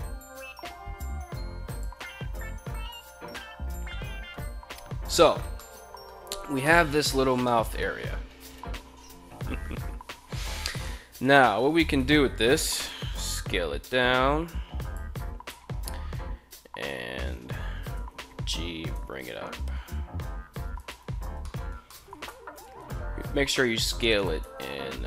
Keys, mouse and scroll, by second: 1.1 click, 1.5 Tab, 2.8-3.6 middle drag, 5.0-5.6 middle drag, 6.1 middle drag, 6.9 middle drag, 8.0 KP_1, 9.8 Tab, 10.7 Tab, 11.4 Tab, 11.9 a, 12.3 s, 14.3 click, 14.8 Tab, 17.5 g, 18.5 z, 20.3 click, 20.9 shift+middle click, 21.4 shift+middle click, 21.7 Tab, 22.7 s, 23.6 click, 24.0 Tab.